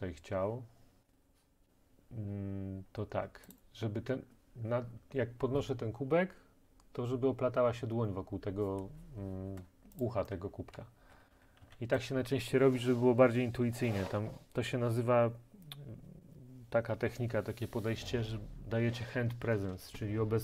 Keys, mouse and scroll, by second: 3.6 click, 10.1 click, 10.5-11.7 typing, 12.0 right click.